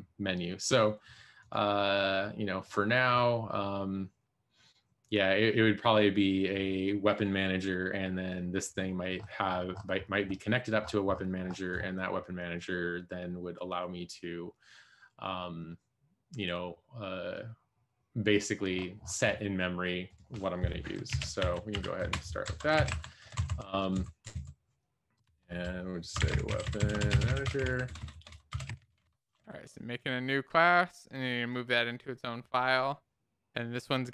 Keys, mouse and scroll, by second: 21.1 ctrl+d, 21.4 Up, 21.6 End, 21.9 End, 22.8 ctrl+s, 22.8 Up, 23.3 ctrl+Right, 23.9 Right, 24.3 Right, 25.9 shift+F6, 26.1-29.2 typing, 30.3 ctrl+., 30.4 Down, 30.6 Down, 30.8 Down, 31.0 Down.